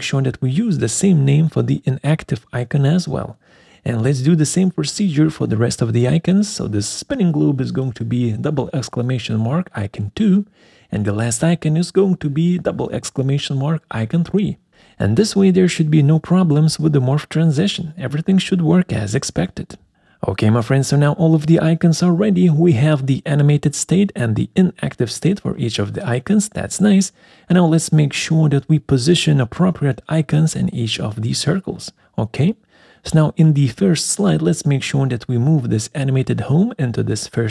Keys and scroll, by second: 0.0 ctrl+a, 0.7 ctrl+c, 3.2 ctrl+a, 3.4 ctrl+v, 4.3 Return, 7.2 ctrl+v, 8.3 BackSpace, 8.4 2, 9.1 ctrl+a, 9.4 ctrl+c, 11.3 ctrl+a, 11.4 ctrl+v, 13.8 ctrl+v, 14.8 BackSpace, 14.8 3, 16.4 ctrl+a, 16.6 ctrl+c, 18.0 ctrl+a, 20.3 ctrl+c, 21.4 ctrl+v.